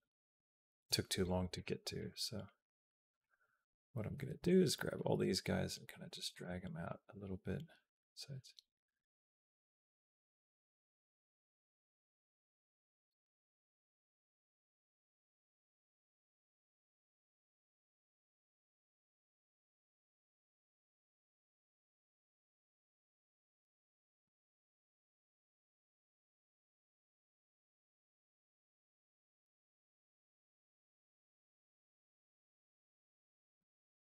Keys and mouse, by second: 1.3 click, 1.8 click, 2.0 g, 4.1 b, 4.9 g, 6.7-12.9 drag, 13.0 click, 13.2 click, 13.7 g, 13.9 click, 14.2 g, 15.4 click, 16.9 click, 17.5 g, 18.1-23.4 drag, 23.8 click, 24.0 g, 25.1 click, 25.2 g, 26.2 click, 26.7 g, 27.7 click, 27.9 space, 29.3 space, 29.5-31.6 drag, 31.8 click, 32.0 g, 33.2 click, 33.4 space.